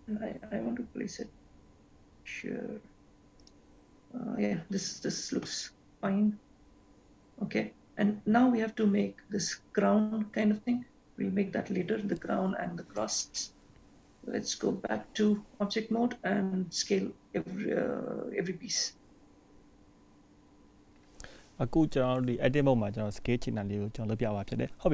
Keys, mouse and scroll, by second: 13.5 shift+middle click.